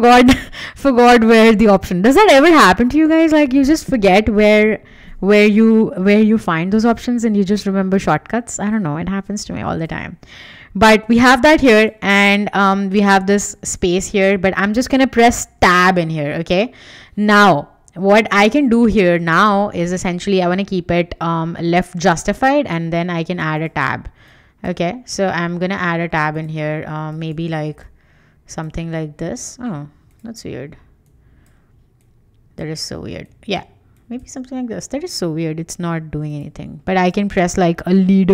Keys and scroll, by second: 13.5 BackSpace, 15.7 Tab, 16.3 Escape.